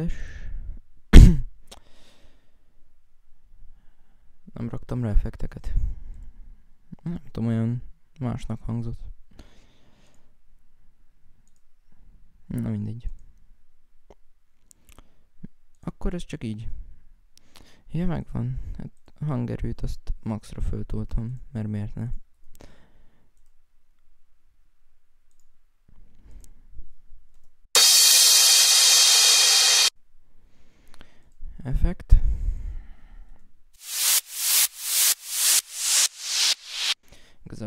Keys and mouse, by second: 1.8 right click, 2.9 right click, 5.7 F6, 5.8 F7, 5.9 F6, 6.0 F5, 6.4 F6, 6.6 F5, 6.9 F6, 7.2 F5, 9.0 right click, 10.3 F1, 10.5 F7, 10.5 alt+F8, 10.5 right click, 10.8 F7, 11.0 F6, 11.1 F9, 11.7 right click, 13.5 right click, 14.2 F1, 15.8 F1, 19.8 click, 23.1 right click, 24.8 right click, 25.1 right click, 30.8 right click, 31.5 right click, 31.7 right click, 32.3-33.3 right drag.